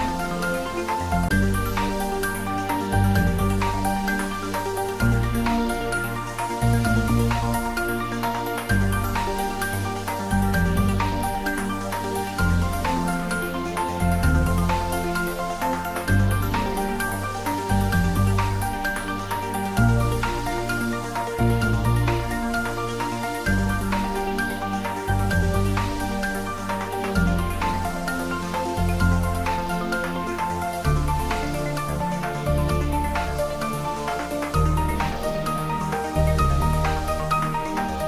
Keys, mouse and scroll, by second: 8.8-13.2 drag, 13.2 click, 16.4 click, 19.9 click, 24.2 click, 27.5 click, 28.2 click, 34.5 click.